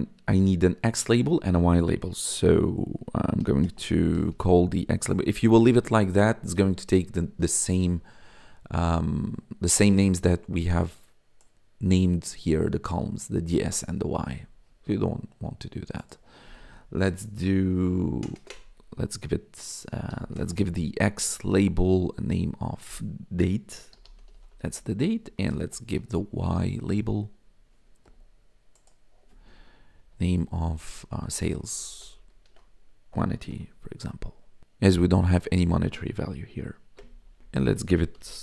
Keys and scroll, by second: 3.3-5.5 typing, 18.2 Left, 18.3 space, 18.4 Left, 20.0 ,, 20.3 space, 20.5 x, 21.4 Tab, 23.3-26.0 typing, 27.3 Up, 29.9 ', 31.0-33.9 typing, 32.4 ctrl+s, 32.7 Right, 34.5 Right, 37.0 Return, 37.8-38.4 typing.